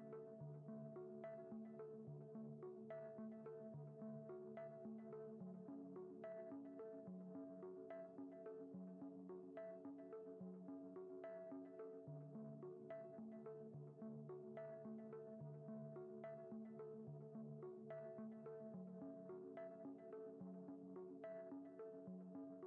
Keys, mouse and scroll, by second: 0.0 click, 0.2-1.1 middle drag, 2.1 KP_0, 5.2-6.5 drag, 6.6 click, 9.1-11.9 drag, 12.8 drag, 14.0 x, 17.4-17.8 drag, 18.6 shift+a.